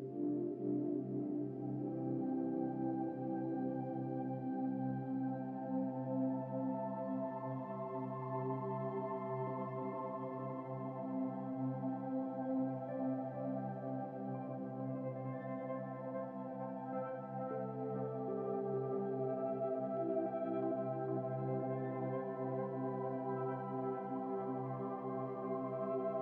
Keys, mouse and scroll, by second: 0.0-1.1 scroll down 8, 1.8-3.3 drag, 7.2-7.7 scroll up 8, 7.7 shift+middle click, 8.0 Tab, 9.1 Tab, 9.8-11.4 drag, 13.7 Tab, 14.0-14.5 scroll up 3, 14.5-15.2 scroll down 13, 15.4 Tab, 15.9 Tab, 16.4 Tab, 16.9 ctrl+a, 18.0-19.7 right drag, 20.4 n, 23.4 click, 25.4-26.2 drag.